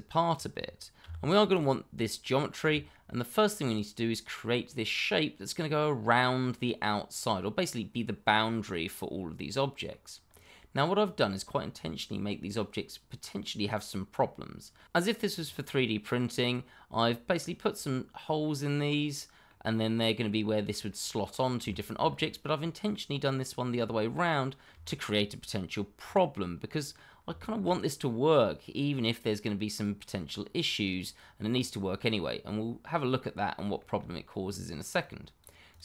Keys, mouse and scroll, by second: 1.0 g, 1.5 click, 3.0 middle click, 8.6 middle click, 10.2-11.0 scroll up 1, 11.0 click, 12.2 scroll up 1, 12.5 middle click, 17.0 middle click, 21.6 shift+middle click, 21.7 middle click, 21.8 shift+middle click, 22.0-22.5 scroll up 1, 22.5 middle click, 23.7-24.1 scroll down 1, 24.1 middle click, 25.0 shift+middle click, 25.4-26.0 scroll down 1, 26.0 middle click, 27.3 shift+middle click, 27.4 middle click, 27.5 shift+middle click, 28.0 middle click, 29.4 click, 31.4 click, 33.2 middle click, 33.9 shift+middle click, 34.9 click.